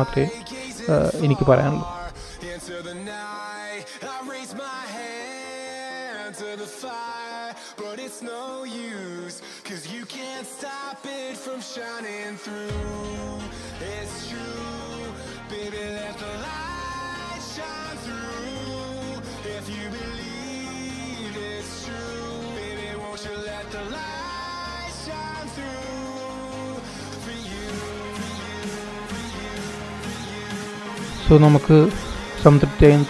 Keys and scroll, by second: 27.5 super+-, 28.0 super+-, 29.1 super+=, 29.6 super+-.